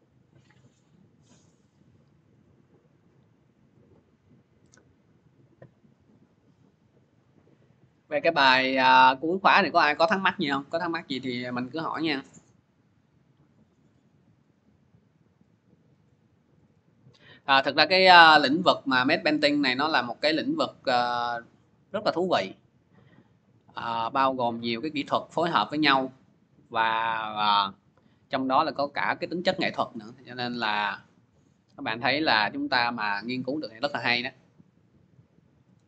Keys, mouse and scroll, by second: 0.0 click, 2.4 click, 3.7 click, 7.3-8.8 drag, 31.9-35.8 drag.